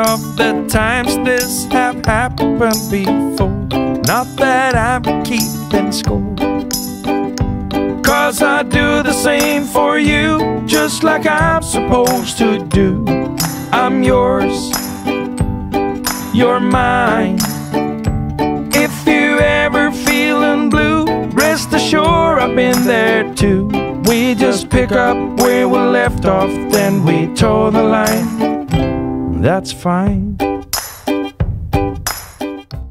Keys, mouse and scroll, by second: 1.4 click, 2.6 double click, 4.3 click, 4.6-4.9 BackSpace, 6.0 BackSpace, 7.8 click, 11.8 click, 12.7 click, 14.7 click, 16.4 click, 17.9 typing, 20.7 click.